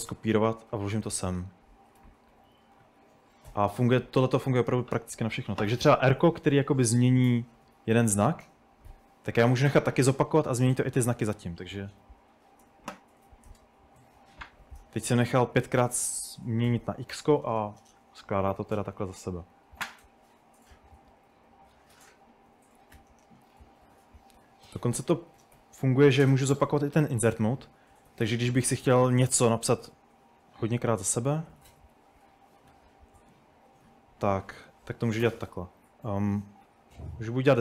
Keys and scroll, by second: 0.0-0.2 typing, 2.0-4.6 typing, 6.4-8.9 typing, 10.8 typing, 12.1 typing, 14.1 typing, 18.3-18.8 typing, 19.9 u, 22.8-24.2 typing, 25.4 typing, 26.3 Return, 26.7 Escape, 26.9-28.1 typing, 30.4-32.4 typing, 32.7 Escape, 36.5-37.6 typing.